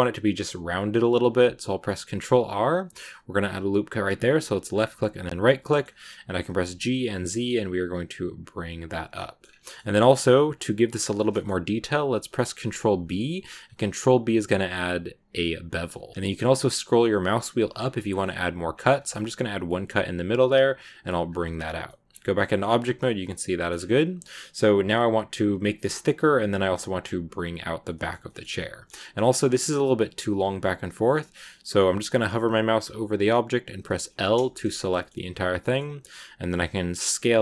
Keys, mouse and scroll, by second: 5.5-6.4 scroll up 2, 5.5 middle click, 6.4 g, 9.0 middle click, 9.3 scroll down 3, 9.5 middle click, 10.4-11.1 scroll up 1, 11.1 scroll up 1, 11.2-15.4 middle drag, 21.4 scroll down 2, 21.7 middle click, 22.0 Tab, 22.2 middle click, 22.5 scroll down 2, 22.8 middle click, 23.6 scroll up 4, 23.7 Tab, 24.7 shift+scroll up 1, 26.9 scroll down 2, 27.8 middle click, 28.0 scroll down 1, 28.3 a, 28.4-30.4 middle drag, 30.4-33.5 scroll up 2, 34.4 shift+middle click, 34.6 scroll up 1, 34.8-37.0 middle drag, 37.0 s.